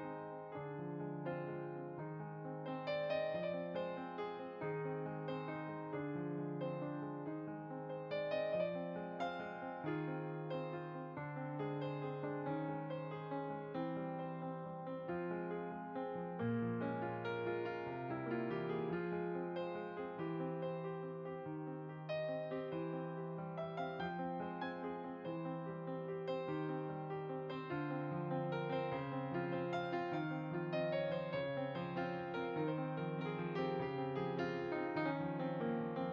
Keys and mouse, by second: 1.2 click, 2.4 middle click, 3.0 click, 4.4 shift+click, 5.7 ctrl+b, 7.4 click, 7.8 Tab, 10.8 click, 12.0 middle click, 13.5 s, 13.8 x, 14.7 click, 16.0 g, 17.3 click, 18.0 s, 18.6 click, 35.9 click.